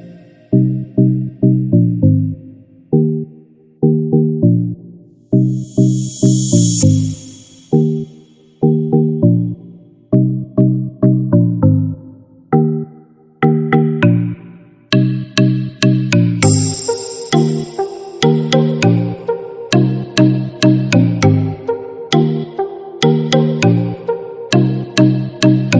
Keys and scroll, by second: 5.6 ctrl+-.